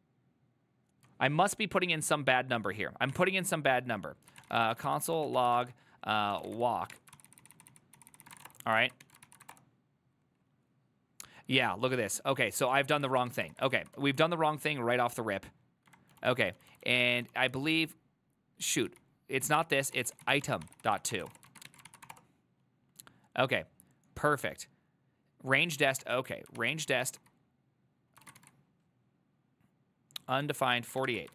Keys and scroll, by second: 0.9-10.0 typing, 13.4-22.6 typing, 13.6 ctrl+c, 13.7 ctrl+c, 26.1-27.3 typing, 26.7 ctrl+c, 28.3 ctrl+a, 28.5 2, 30.9 ctrl+a, 31.2 1.